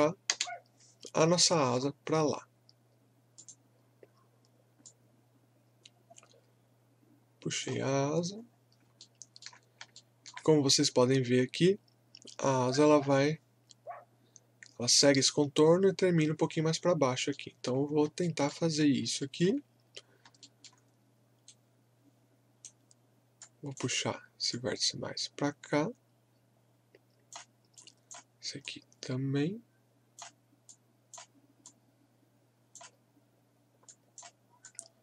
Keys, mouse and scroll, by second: 0.9-1.3 scroll down 1, 1.5 alt+middle click, 2.0-2.3 scroll up 1, 3.3-8.4 drag, 8.4 scroll up 1, 9.0-13.0 alt+middle drag, 16.8-17.2 scroll up 1, 17.3 alt+middle click, 17.8 scroll up 1, 18.2 alt+middle click, 18.8 scroll up 1, 19.2 alt+middle click, 20.0 scroll up 1, 20.4 alt+middle click, 21.4-23.4 right drag, 23.4-35.0 drag.